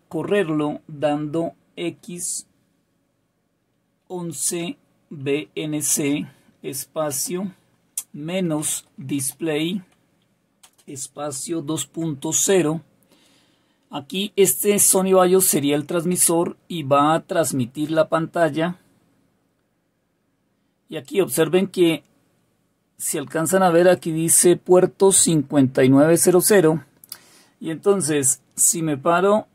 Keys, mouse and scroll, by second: 1.7 typing, 4.9-11.1 typing, 12.3 typing, 16.0 Return.